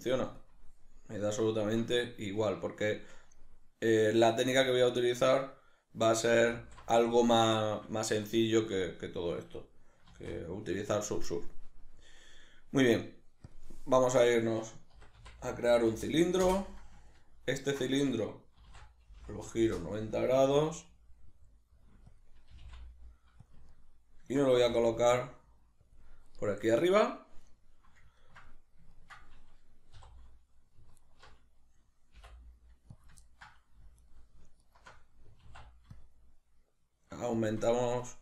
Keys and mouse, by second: 0.4-1.2 drag, 1.2-22.2 middle drag, 6.5 alt+q, 10.1 shift+a, 14.4 Tab, 16.9 Return, 18.5 r, 22.2 click, 22.5 g, 23.5 click, 23.7 ctrl+middle click, 24.6 g, 26.0 click, 28.2-31.0 ctrl+middle drag, 30.0 3, 31.0 alt+right click, 32.2 i, 33.0 click, 33.2 ctrl+middle click, 34.0 alt+right click, 34.6 alt+shift+right click, 35.4 alt+e, 37.5 shift+click, 37.7 middle click.